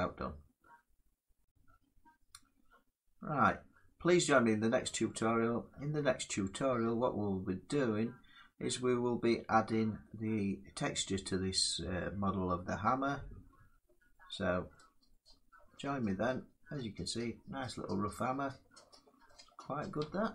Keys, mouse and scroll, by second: 5.6 Tab, 13.8 middle click, 14.3 scroll, 14.3-16.9 middle drag, 17.4-18.8 middle drag, 17.4 scroll up 6, 19.6 scroll up 1.